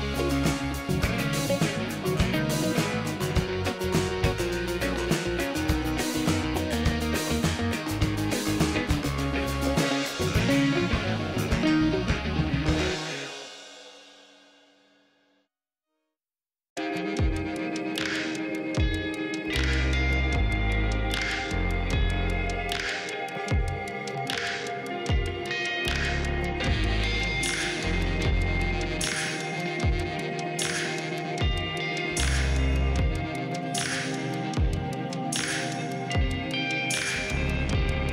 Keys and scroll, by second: 1.4 ctrl+alt+d, 12.6 ctrl+d, 12.9 space, 14.8 space, 15.8 alt+space, 33.2 ctrl+alt+d, 36.7 ctrl+u.